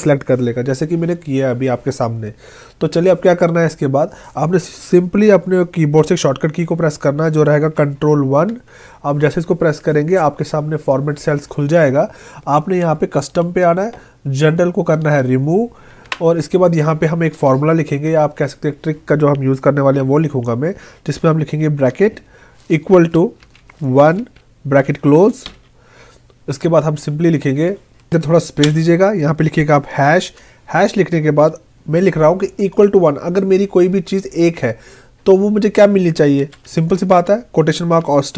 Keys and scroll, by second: 8.5 ctrl+1, 16.1 Delete.